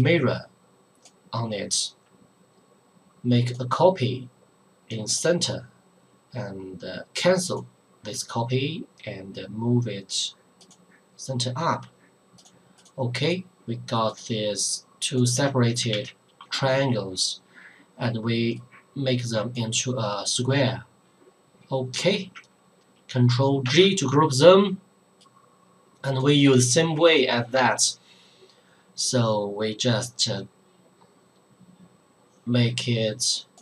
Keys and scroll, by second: 15.9 ctrl+z, 23.6 ctrl+g.